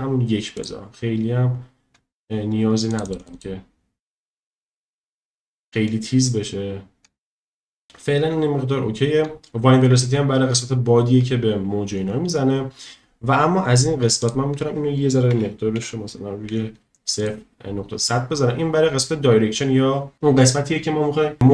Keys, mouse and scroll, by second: 2.9 click, 3.1 click, 3.2 click, 14.2-17.3 drag.